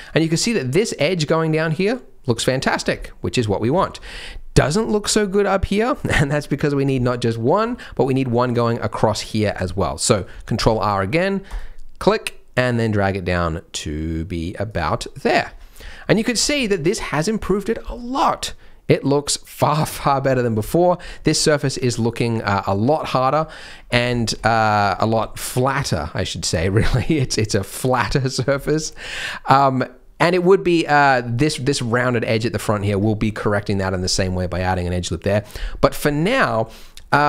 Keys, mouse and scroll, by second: 0.0 scroll down 1, 0.1 middle click, 2.2 middle click, 2.7 scroll down 3, 2.9 middle click, 3.8 shift+middle click, 4.0 scroll up 2, 4.2 middle click, 4.6 Tab, 5.2 middle click, 6.1 Tab, 6.3 middle click, 9.5 middle click, 9.8 middle click, 10.5 ctrl+r, 14.9 middle click, 15.4 Tab, 15.9 shift+middle click, 16.3-16.6 scroll down 3, 16.6 middle click, 17.9 middle click, 20.0 scroll up 2, 20.3 middle click, 20.6 shift+middle click, 21.0-21.6 scroll up 1, 21.6 middle click, 21.6 scroll up 1, 22.8 middle click, 23.4 middle click, 23.6-24.0 scroll down 6, 24.1 shift+middle click, 24.4 scroll up 2, 24.5 middle click, 26.6 scroll up 2, 26.9 middle click, 28.5 shift+middle click, 28.9 middle click, 30.5 middle click, 30.9 middle click, 31.7 middle click, 32.4 middle click, 32.9 Tab, 33.1 scroll down 3, 35.8 scroll up 2, 36.1 shift+middle click, 36.3 scroll up 2, 36.7 middle click, 37.0 scroll up 1.